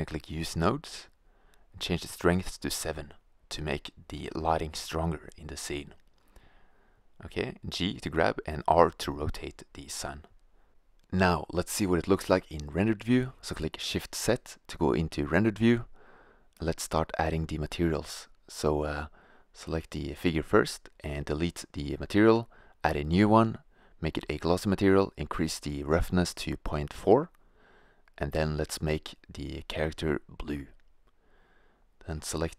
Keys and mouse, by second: 7.0 g, 7.9 r, 8.9 drag, 12.1 click, 13.5 shift+z, 17.4-18.4 drag, 18.6-19.6 drag.